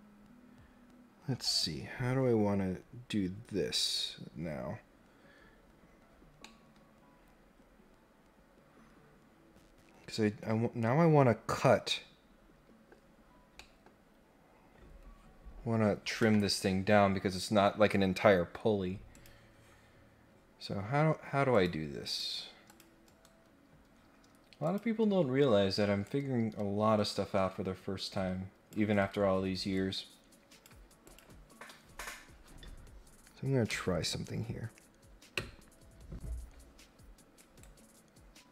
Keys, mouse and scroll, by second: 6.4-12.9 middle drag, 13.6 middle click, 16.2 Tab, 19.1 click, 21.5 click, 22.0 click, 22.6 click, 24.6 click, 25.3 scroll down 1, 26.0-28.7 drag, 28.9 Escape, 29.7 click, 31.0 click, 37.3 right click.